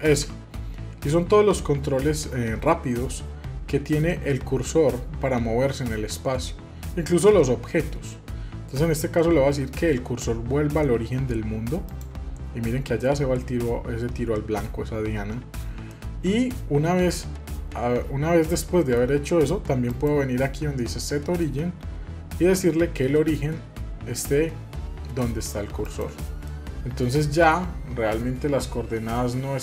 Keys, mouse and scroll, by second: 0.1 shift+s, 13.0-19.9 middle drag, 19.9-26.0 drag, 26.5-28.3 middle drag.